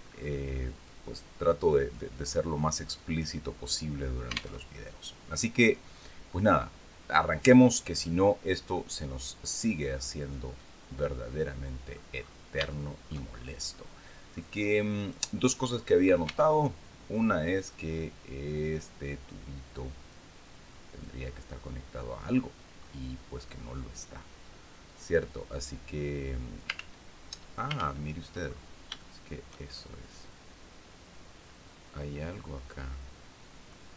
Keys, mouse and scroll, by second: 0.3-1.6 drag, 1.7-2.2 scroll up 2, 4.1 alt+Tab, 8.0 scroll down 2, 8.2-11.6 drag, 11.7-12.0 scroll up 2, 12.2 shift+click, 13.2 middle click, 14.5 right click, 15.0 middle click, 15.8 Tab, 17.2-19.8 drag, 20.5-21.9 drag, 22.3 middle click, 24.4-26.3 drag, 26.3 ctrl+z, 27.2 ctrl+z, 28.0-28.3 ctrl+scroll up 3, 28.5 shift+click, 29.2-31.4 shift+drag, 31.4 scroll up 2, 31.8 scroll down 2, 32.1-33.4 drag, 33.4-33.9 drag.